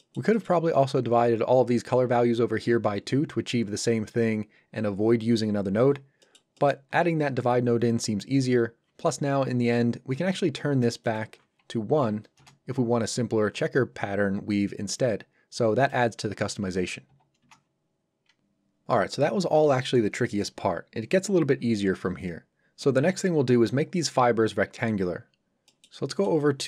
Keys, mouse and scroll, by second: 0.6 scroll up 1, 6.2 middle click, 11.0 click, 12.0 KP_1, 12.3 Return, 15.8 click, 17.0 KP_2, 17.4 Return, 25.3-25.7 scroll down 1, 25.7 middle click.